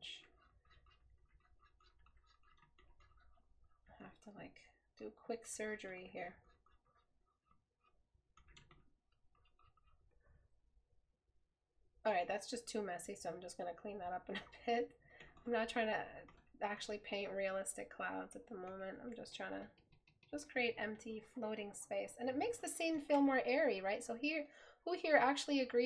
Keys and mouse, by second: 17.3 right click.